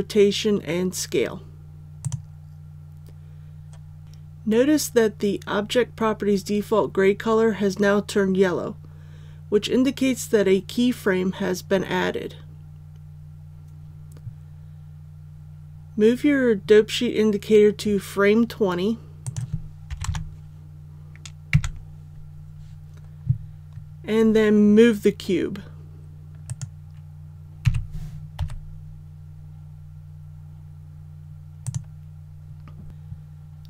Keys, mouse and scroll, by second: 2.0 click, 19.8 KP_2, 20.0 KP_0, 26.4 right click, 27.6 g, 28.3 x, 31.6 click.